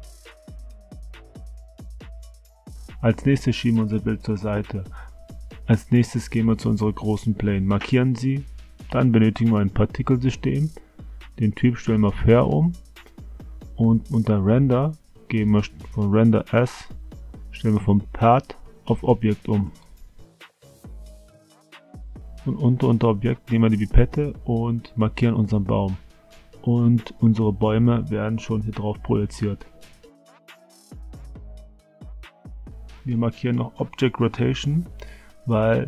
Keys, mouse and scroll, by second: 2.2 Tab, 3.2 Tab, 3.8-4.6 drag, 5.0 click, 8.4 click, 11.8 click, 13.8 click, 16.3 click, 18.4-20.0 drag, 22.9 click, 31.9 click, 34.2-35.8 middle drag.